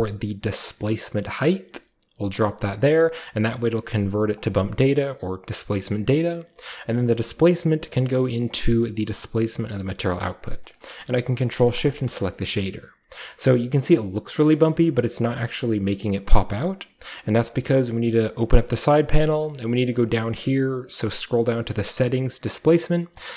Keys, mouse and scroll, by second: 1.4 click, 2.8 click, 4.8-6.4 middle drag, 5.2-5.8 scroll up 1, 5.8-7.5 scroll up 1, 6.1-6.9 typing, 6.2 click, 7.5 click, 8.8-10.1 drag, 10.6 drag, 11.8 click, 12.6-13.3 scroll up 1, 13.3-14.5 scroll up 1, 14.5 scroll up 1, 14.7-16.3 scroll down 1, 16.3-17.6 scroll down 1, 17.6-21.4 drag, 18.8-21.2 scroll down 1, 21.2 scroll down 1.